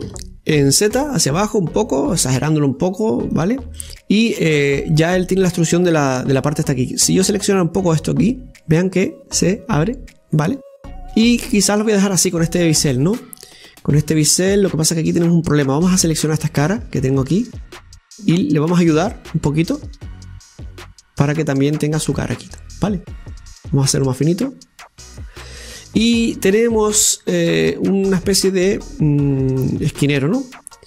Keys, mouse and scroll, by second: 4.7-8.2 middle drag, 8.2-11.2 drag, 11.5-16.8 middle drag, 17.4-18.7 right drag, 18.7 middle click, 19.3 click, 20.2-23.1 drag, 23.1-24.9 middle drag, 24.9-26.3 drag, 26.3-27.6 middle drag, 27.6 scroll down 2, 27.8-30.8 middle drag.